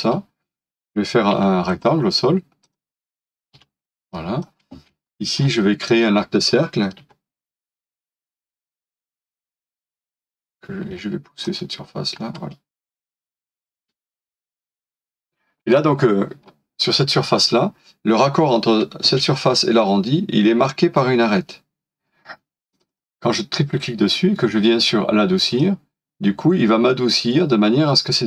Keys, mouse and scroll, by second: 1.4 typing, 3.5 typing, 5.0 scroll up 1, 6.0-7.6 typing, 6.5 middle click, 6.7 scroll down 1, 9.0 double click, 9.5 scroll down 1, 10.9 typing, 13.0 scroll up 1, 15.2 middle click, 16.4 scroll down 1, 19.0 space, 22.9 double click.